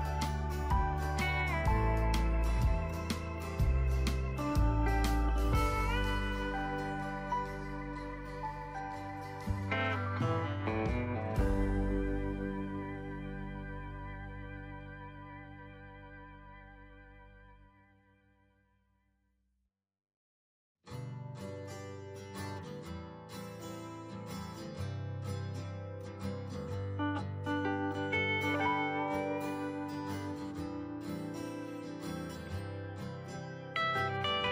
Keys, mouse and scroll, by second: 2.1 alt+shift+click, 5.7-19.5 drag, 33.1 right click.